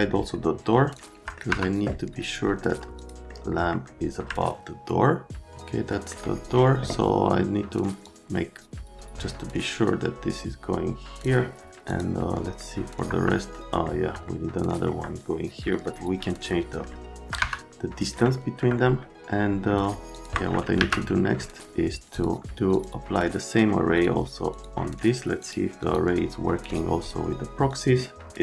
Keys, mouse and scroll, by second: 0.9 click, 1.0 right click, 1.5 F3, 3.0 click, 3.3 middle click, 4.3 middle click, 4.4 right click, 5.9 right click, 8.1 click, 11.9 middle click, 12.6 right click, 13.1 F3, 14.3 middle click, 15.7 middle click, 16.3 middle click, 16.9 right click, 17.2 right click, 17.4 F3, 18.2 middle click, 20.1 click, 20.8 q, 22.1 click, 22.7 click, 24.0 click, 24.5 click, 25.4-25.9 scroll up 2, 26.7 click, 27.0 click, 27.7 click.